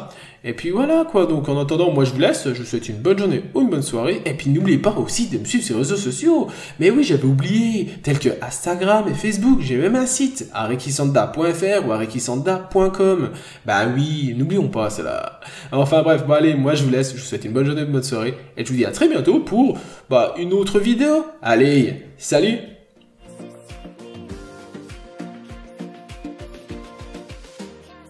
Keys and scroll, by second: 11.1 p, 11.8 ctrl+z, 12.1 b, 12.4-12.7 scroll down 1, 12.7-13.1 scroll up 2, 12.9 n, 15.4 b, 17.5 scroll down 1, 17.6 n, 17.8 scroll up 1, 19.5 b, 23.2 scroll down 1, 23.6 n, 23.8 scroll up 1, 25.0 scroll down 1, 26.0 scroll up 1.